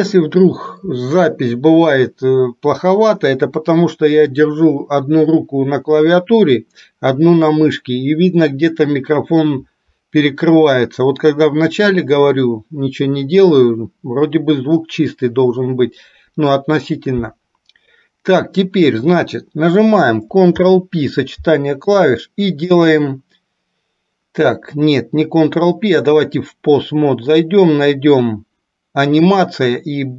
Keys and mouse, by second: 20.6 ctrl+p, 26.1-30.1 drag.